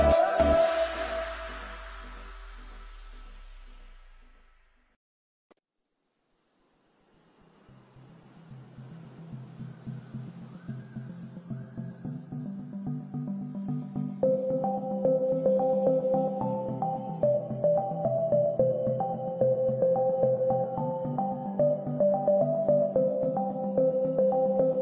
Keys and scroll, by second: 7.0 space, 17.1 space, 17.7 e.